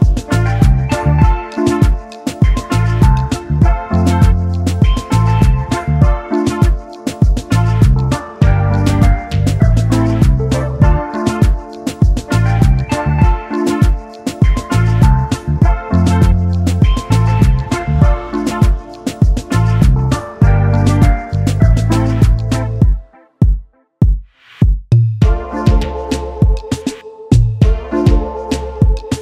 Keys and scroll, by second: 7.1 ctrl+s, 12.8-13.9 typing, 26.6 ctrl+d.